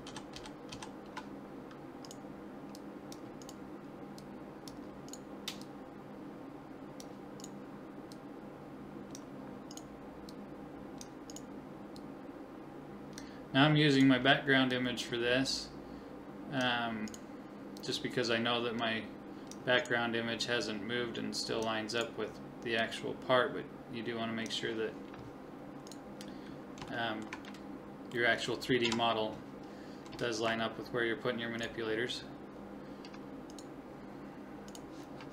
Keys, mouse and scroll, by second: 0.0-0.7 typing, 2.8-5.6 drag, 4.1 right click, 4.3-5.6 right drag, 6.8 click, 8.1-9.2 drag, 10.0-11.0 drag, 10.3 right click, 11.3-13.2 drag, 14.0-16.5 drag, 15.4 right click, 17.1 right click, 17.8-18.8 drag, 19.8 click, 21.5 click, 22.4 click, 23.3-24.5 drag, 25.9-27.1 drag, 27.7-29.2 middle drag, 28.8 KP_1, 29.8-31.6 middle drag, 33.2 click, 33.5-35.3 right drag.